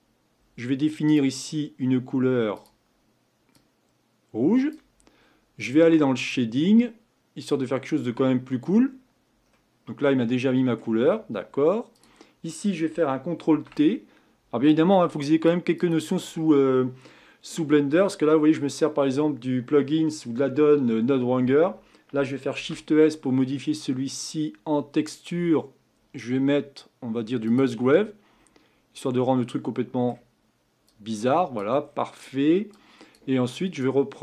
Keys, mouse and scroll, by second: 1.1 click, 2.5 click, 7.7-8.4 drag, 8.7-9.5 scroll up 6, 9.5-12.0 middle drag, 12.0 click, 13.5 ctrl+t, 15.9 click, 29.3-32.7 middle drag, 32.7-34.2 drag.